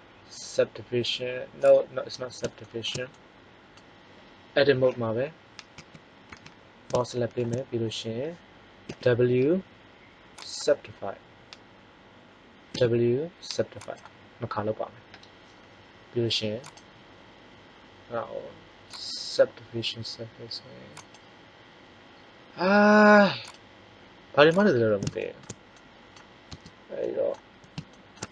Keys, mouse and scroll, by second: 1.5-2.5 drag, 2.5 middle click, 5.7 a, 6.3 a, 8.7 w, 12.6 w, 16.5-19.0 drag, 26.4 Tab.